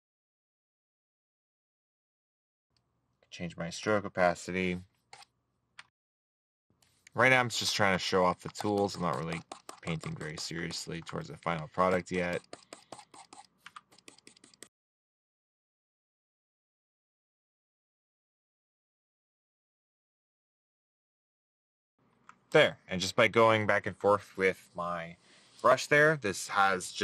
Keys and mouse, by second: 7.6 middle click, 8.8 middle click, 12.0 middle click, 15.1 middle click, 15.6 middle click, 16.1 middle click, 17.2 middle click, 18.1 middle click, 18.2 right click, 18.3 middle click, 19.0 right click, 20.6 middle click, 20.7 right click, 21.1 middle click, 21.9 right click.